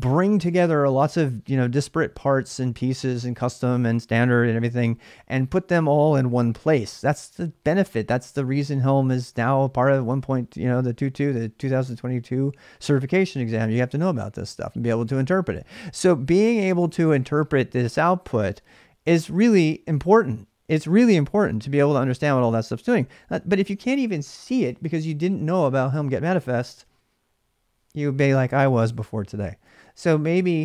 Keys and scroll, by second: 21.3 space, 22.9 typing.